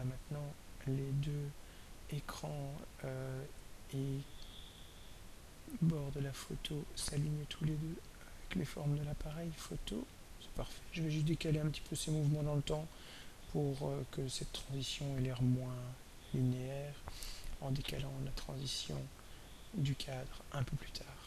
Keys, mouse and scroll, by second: 0.0-0.5 ctrl+scroll down 2, 0.6 ctrl+scroll down 2, 1.2 ctrl+scroll down 2, 1.8 ctrl+scroll down 2, 5.1-16.2 drag, 17.8 click, 20.9-21.2 drag.